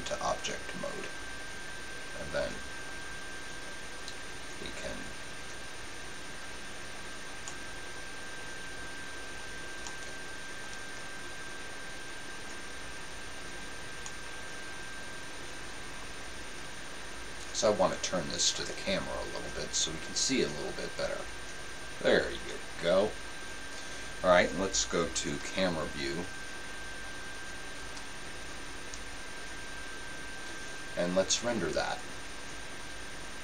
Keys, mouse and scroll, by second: 3.2-4.9 right drag, 4.9-14.3 drag, 14.3-16.2 middle drag, 19.8-21.5 drag, 25.5 KP_5, 27.8 KP_0, 31.8-33.4 drag.